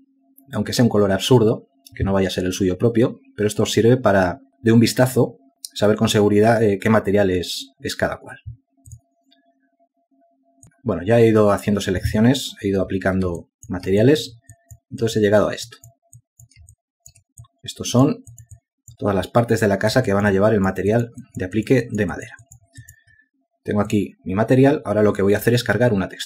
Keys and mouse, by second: 10.7 alt+click, 14.9 ctrl+alt+click, 15.5 alt+shift+click, 16.5 alt+click, 17.2 alt+click, 17.7 alt+click, 18.2 alt+shift+click, 18.9 alt+click, 19.8 alt+click, 21.6 alt+click, 22.4 alt+click, 22.9 alt+double click, 23.5 alt+double click, 23.7 alt+click, 24.0 alt+click, 24.3 alt+click.